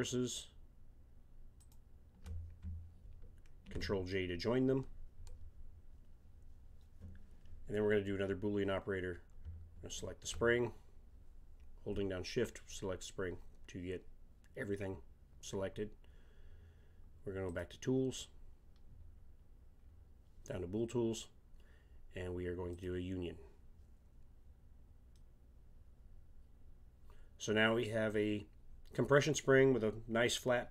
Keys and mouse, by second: 1.6-3.4 drag, 3.6 ctrl+j, 9.9-11.8 drag, 17.4-19.3 drag, 19.3-22.7 middle drag, 22.7-24.6 drag, 25.3 middle drag.